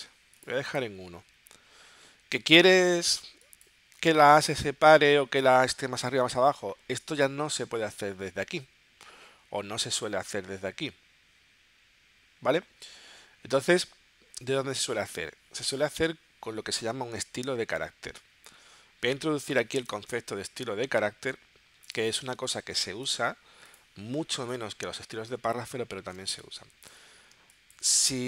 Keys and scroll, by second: 27.3 space.